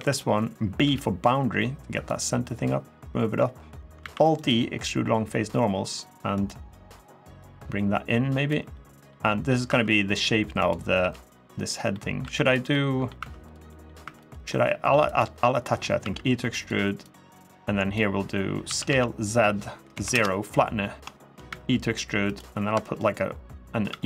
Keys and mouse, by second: 0.6 b, 1.8 click, 2.5-3.5 drag, 3.8 alt+e, 6.1 click, 6.5 middle click, 7.2-8.3 drag, 8.5 middle click, 9.0 middle click, 9.4 2, 10.8 g, 11.3 click, 11.7 middle click, 12.0 3, 12.2 click, 12.5 middle click, 12.9 2, 13.4 middle click, 13.8 3, 14.0 click, 14.2 middle click, 14.9 click, 15.3 middle click, 15.8 e, 16.3 click, 16.8 click, 18.4 s, 18.6 z, 19.7 0, 19.9 Return, 20.9 shift+middle click, 21.2 e, 22.0 click, 22.4 3, 23.6 e.